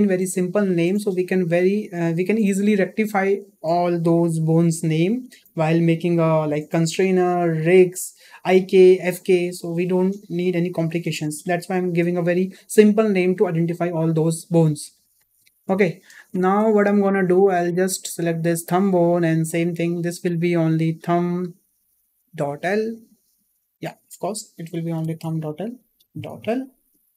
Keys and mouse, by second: 15.7 shift+middle click, 17.1 shift+middle drag, 17.5-18.1 middle drag, 20.2-27.1 drag, 25.1 BackSpace.